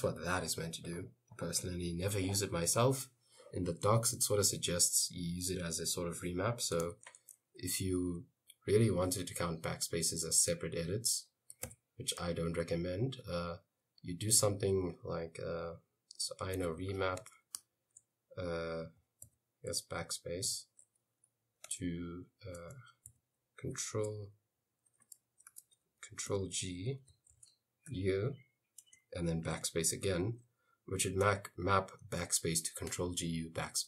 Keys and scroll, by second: 7.0 shift+;, 11.4-12.2 typing, 16.0-17.6 typing, 19.1-21.0 typing, 22.7-23.7 typing, 24.8-27.9 typing, 29.1-30.7 typing.